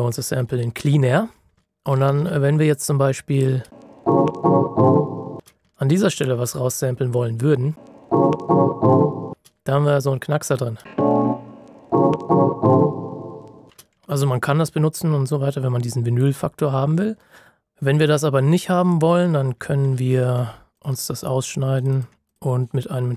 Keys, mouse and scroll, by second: 1.6 ctrl+shift+scroll up 1, 3.3 click, 3.6 space, 5.6 ctrl+shift+scroll up 1, 7.7 space, 10.4 click, 10.7 space, 13.6 space, 14.0-15.4 scroll up 1, 19.8 z, 19.9 ctrl+shift+scroll up 1, 20.7 ctrl+click.